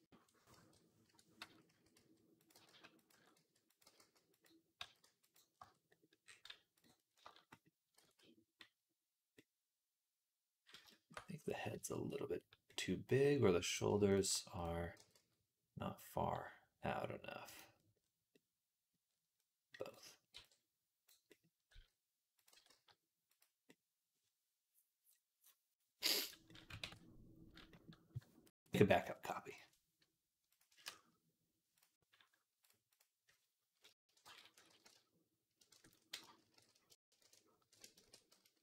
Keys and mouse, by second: 1.5-4.6 typing, 5.7 Tab, 6.0 middle click, 6.6 click, 6.7-9.2 middle drag, 7.9 ctrl+s, 11.6-13.5 shift+middle drag, 13.5 click, 14.8 g, 18.2-21.5 drag, 20.2 b, 21.5 s, 22.3 g, 25.3-38.6 middle drag, 26.7 ctrl+s, 29.3-38.6 drag.